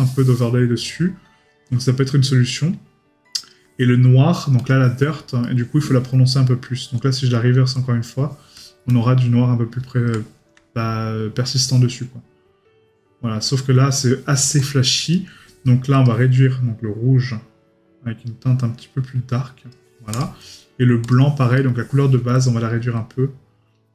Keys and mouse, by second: 5.4 right click, 15.1 right click, 21.6 right click.